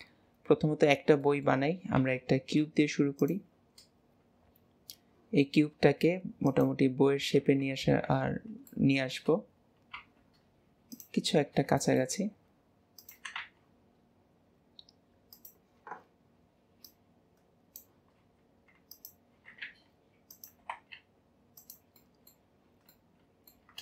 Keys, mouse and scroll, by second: 1.2-1.6 middle drag, 1.6-2.1 scroll down 2, 2.1 shift+a, 3.6 scroll down 1, 4.0 scroll up 1, 4.0-5.4 scroll down 2, 5.4 s, 7.3 KP_1, 7.8 alt+z, 8.7-9.4 shift+middle drag, 9.4 scroll up 2, 11.4-11.8 scroll up 3, 11.8-12.2 shift+middle drag, 12.2 s, 16.8 click, 22.0-23.8 middle drag.